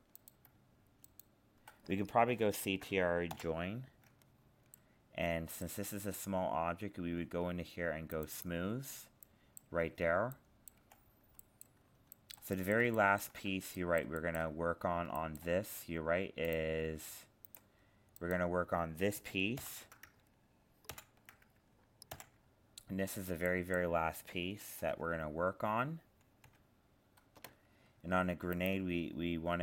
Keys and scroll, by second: 3.3 ctrl+j, 19.6 ctrl+l, 20.9 ctrl+i, 21.0 ctrl+".